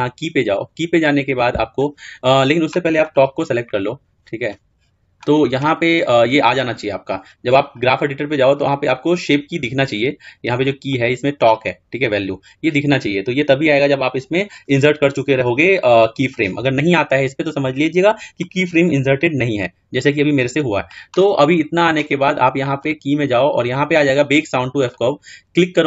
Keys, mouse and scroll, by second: 3.0 click, 10.8 click, 22.8-25.4 drag.